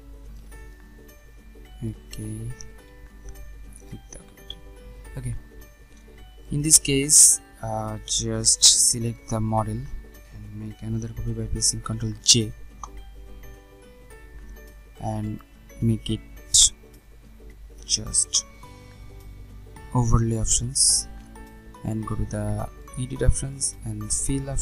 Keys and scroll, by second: 11.2 ctrl+j.